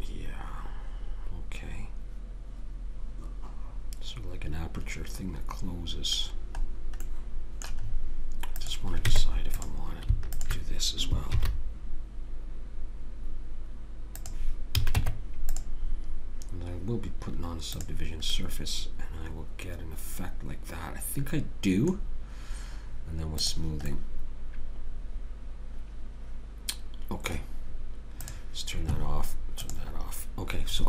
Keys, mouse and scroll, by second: 6.3-7.4 middle drag, 9.1 Tab, 11.3 ctrl+b, 14.8 a, 15.0 Tab, 17.8 click, 19.5 middle click, 23.4 click, 25.2 middle click, 28.2-30.8 drag.